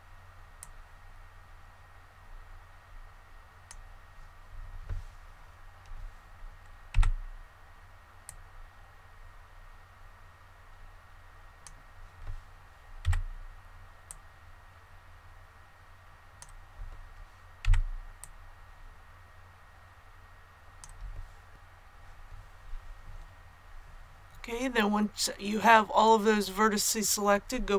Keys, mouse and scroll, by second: 0.5-4.1 drag, 6.8 b, 8.2-12.1 drag, 13.0 b, 14.0-17.2 drag, 17.6 b, 18.1-21.2 drag, 21.5-23.1 scroll down 1.